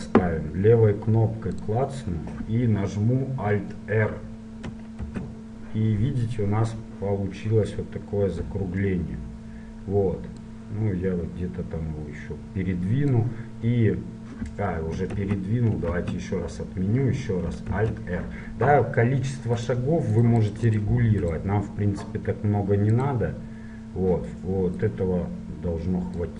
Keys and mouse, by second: 1.7-3.5 drag, 5.2 alt+r, 7.7-8.8 middle drag, 9.4-10.7 middle drag, 10.7-13.3 drag, 16.1 ctrl+z, 17.9 alt+r, 19.7-21.2 drag, 23.2-26.3 drag.